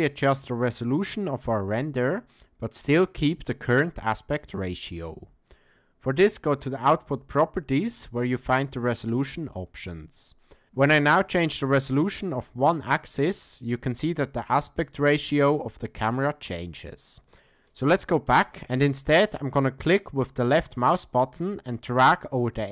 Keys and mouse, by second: 10.6 ctrl+z, 12.5-16.7 drag, 18.3 ctrl+z.